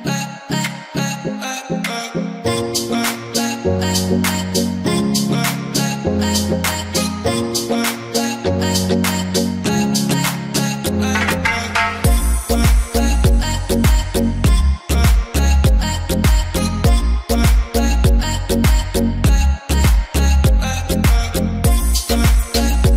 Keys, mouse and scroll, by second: 1.8 i, 2.0 click, 2.7 v, 2.9 right click, 4.2 click, 5.4 m, 6.9-10.4 drag, 10.4 i, 10.7 click, 11.4 v, 11.7 right click, 14.4 click, 17.2 click, 18.0-22.9 alt+drag.